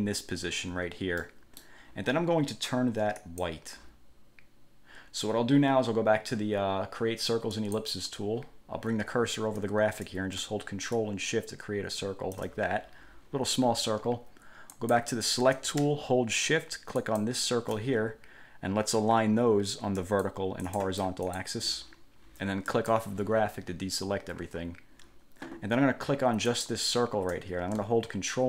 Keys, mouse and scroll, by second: 1.4 middle click, 3.4 click, 7.8 click, 11.1-12.7 ctrl+shift+drag, 14.9 click, 17.2 shift+click, 20.2 click, 20.8 click, 21.4 click, 22.8 click, 26.6 click.